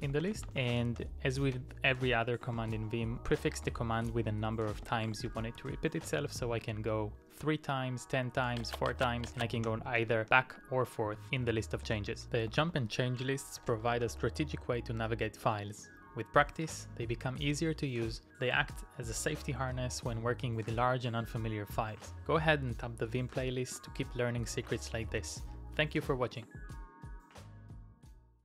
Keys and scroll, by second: 0.0-6.1 typing, 9.0-10.6 typing, 11.8-14.6 typing.